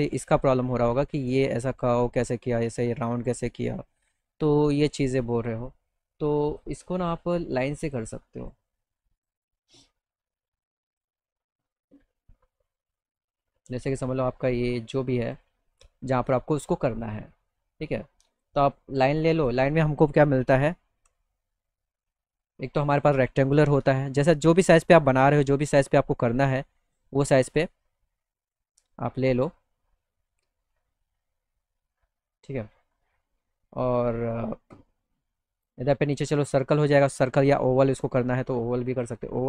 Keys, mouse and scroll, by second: 6.5 click, 7.9 click, 9.2 click, 10.9 click, 13.0-15.4 drag, 15.8 right click, 16.2 click, 18.3 click, 19.4 click, 21.7 click, 24.0 click, 25.1-26.4 drag, 26.5 click, 27.2 click, 31.3 click, 32.1 click, 32.5 click, 32.8 click, 34.0 click, 34.0 right click, 35.6 click, 37.1-39.1 drag.